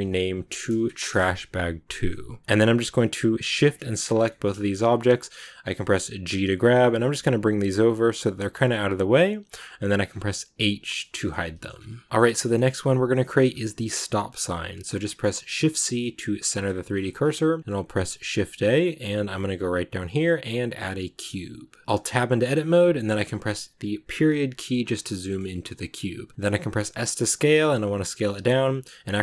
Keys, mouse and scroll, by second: 2.4 scroll up 2, 2.5 right click, 3.4 shift+right click, 4.0 scroll down 2, 4.1 shift+middle click, 4.5 shift+scroll up 1, 4.7 scroll down 2, 5.0-6.2 middle drag, 6.2 g, 10.4 h, 10.7 scroll down 1, 10.9 middle click, 11.6-11.9 scroll up 2, 11.9-13.3 shift+middle drag, 13.3-13.8 shift+scroll up 3, 13.8 click, 14.4 shift+middle click, 15.3 shift+c, 15.8 shift+middle click, 16.8-17.1 scroll up 10, 21.8 middle click, 21.8 Tab, 23.8 KP_Decimal, 24.6 scroll down 1, 25.1-26.3 middle drag, 26.3 s.